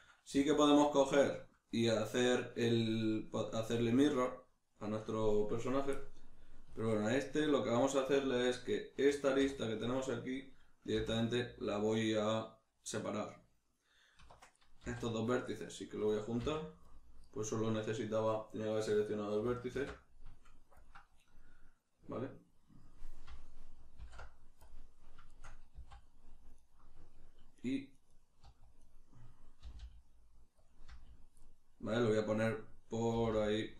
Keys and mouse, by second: 0.5 alt+q, 4.2 shift+middle click, 6.0-8.4 middle drag, 8.4 right click, 9.3 2, 9.5 right click, 10.9 v, 13.2 right click, 14.1 1, 14.5 right click, 14.8 z, 15.5-17.3 middle drag, 16.4 c, 17.3 right click, 19.8 alt+m, 24.0 alt+m, 25.3-26.6 shift+middle drag, 25.7 z, 26.6 right click, 27.6 right click, 28.0 right click, 28.1 right click, 28.4 z, 28.8 right click, 29.6 g, 30.7 click, 30.9 z, 31.4-33.7 middle drag, 33.1 g.